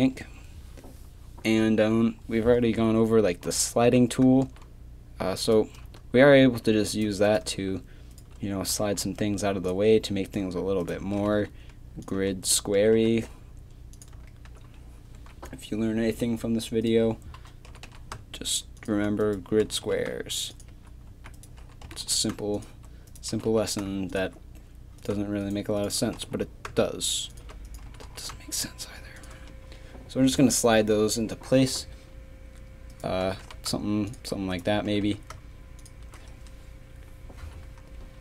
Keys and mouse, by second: 3.1-5.9 middle drag, 3.5 g, 6.4 middle click, 8.7 g, 11.2 g, 12.8 g, 15.2 a, 16.2 click, 17.7 g, 18.7 click, 19.7 g, 21.1 a, 21.4-23.3 drag, 21.9 g, 23.3 g, 25.5 shift+right click, 26.2 g, 27.9 g, 31.6-32.9 middle drag, 33.3 g, 34.9 g, 37.3 a.